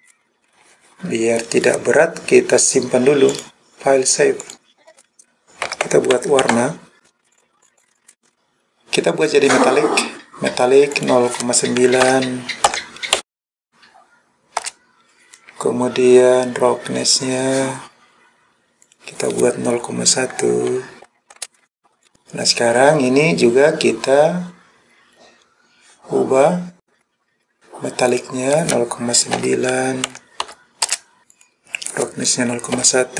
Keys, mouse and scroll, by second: 3.4-4.6 drag, 8.3-9.5 scroll down 4, 9.5-11.0 scroll down 1, 11.0-14.7 drag, 16.7-18.9 scroll down 2, 18.9-21.5 drag, 22.1 click, 24.4-24.8 scroll down 1, 24.9-25.3 scroll up 1, 25.3 scroll down 1, 25.9-26.5 scroll down 2, 26.5-27.0 scroll up 7, 27.0-27.5 scroll down 4, 28.1-30.9 drag, 31.2 scroll down 6, 31.3-33.1 drag.